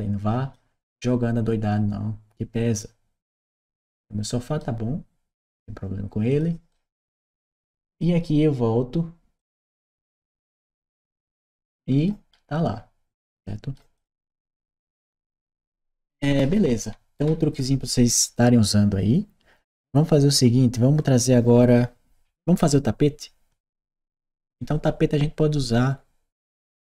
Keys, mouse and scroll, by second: 6.5 right click, 7.7 click, 9.2 click, 9.7 right click, 11.1 right click, 13.2 right click, 13.7 click, 15.9-17.3 right drag.